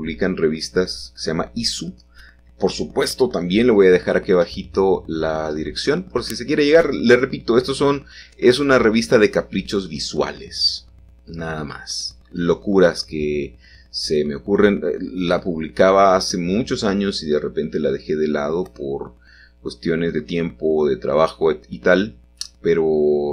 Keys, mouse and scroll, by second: 0.1 z, 3.7-4.8 drag, 7.3 r, 7.7 x, 9.7-12.1 drag, 12.1 middle click, 12.8-14.3 shift+drag, 14.3 g, 14.8 z, 18.0-19.1 drag, 19.4-21.2 scroll down 1, 21.2 middle click, 21.4-23.2 middle drag.